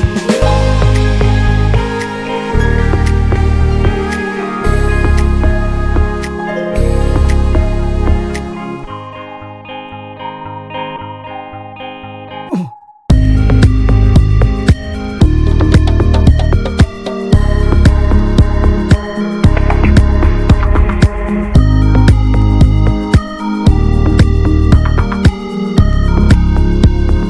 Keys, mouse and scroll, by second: 0.4 scroll up 1, 0.6-1.0 scroll down 1, 1.0-2.6 middle drag, 2.6 ctrl+s, 2.8-4.7 middle drag, 4.7 scroll up 1, 5.0-7.6 middle drag, 7.6 ctrl+s, 10.0 scroll up 1, 10.3-10.9 shift+middle drag, 10.9 click, 11.1 Tab, 11.4 click, 11.6 l, 12.6 middle click, 13.0 alt+z, 13.4 click, 14.1 alt+z, 14.4 middle click, 14.6-15.6 scroll up 1, 15.6 click, 15.8 l, 16.6 click, 16.9 l, 17.0-17.8 scroll down 2, 17.8 middle click, 17.9 scroll up 1, 18.2 alt+h, 18.6 click, 18.8 click, 18.9 l, 20.1-23.7 drag, 23.7 Tab, 26.0-27.1 drag, 27.1-27.2 scroll up 5.